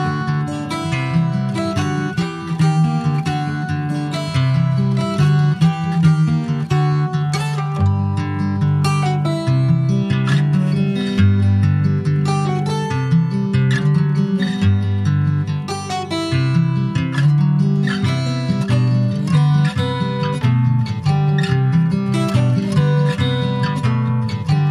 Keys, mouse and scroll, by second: 1.1-7.0 drag, 7.5-12.0 drag, 12.8-24.7 drag.